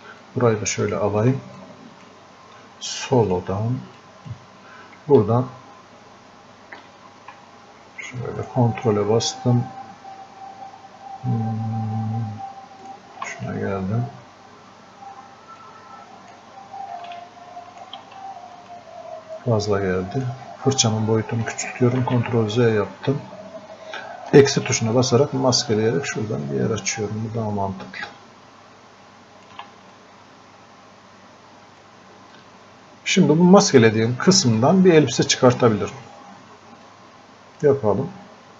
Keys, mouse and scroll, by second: 0.3-1.6 ctrl+drag, 1.6-3.3 drag, 8.5 ctrl+click, 12.9 ctrl+click, 15.7-17.2 ctrl+drag, 17.2-18.6 ctrl+alt+drag, 18.6 right click, 19.4-22.0 drag, 22.0 ctrl+z, 25.0-30.0 ctrl+alt+drag, 30.0-32.3 drag, 32.3-34.6 drag, 34.6-36.9 drag, 36.9-38.5 drag.